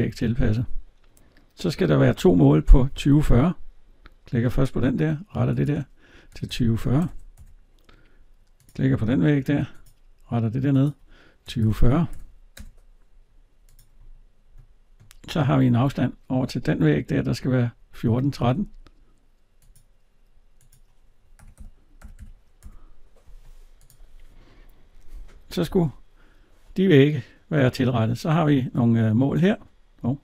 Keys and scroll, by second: 7.1 Return, 12.4 Return, 15.7 alt+Tab, 22.4 Return, 25.5 alt+Tab.